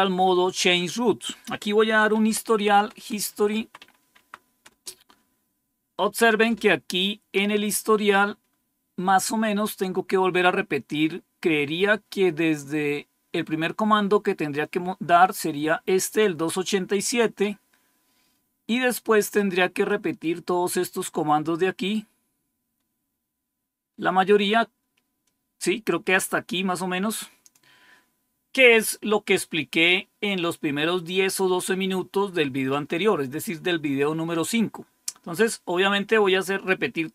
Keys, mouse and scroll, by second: 1.9-4.2 typing, 4.6 Return, 14.5-16.1 drag, 17.8 scroll down 2, 18.4 scroll down 2, 19.8-27.5 drag.